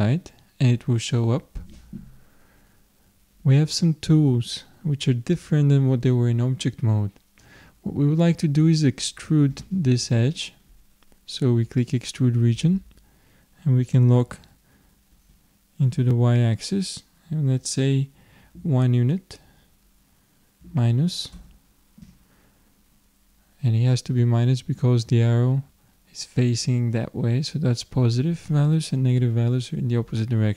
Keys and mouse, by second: 11.8-13.6 drag.